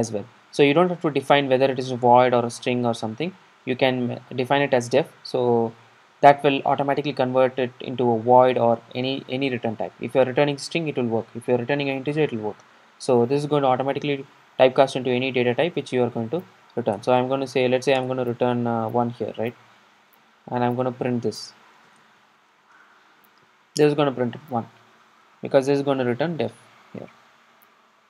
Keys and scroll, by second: 18.1 Return, 24.4 super+r.